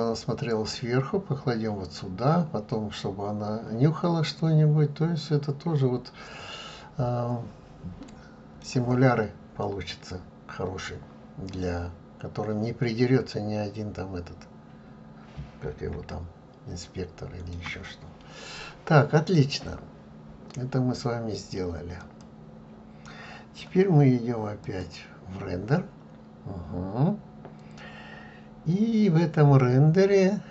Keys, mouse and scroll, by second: 4.7-7.6 middle drag, 13.9-14.6 scroll down 1, 14.6-15.6 scroll up 2, 16.4-22.3 shift+middle drag, 22.3 click, 24.7 click.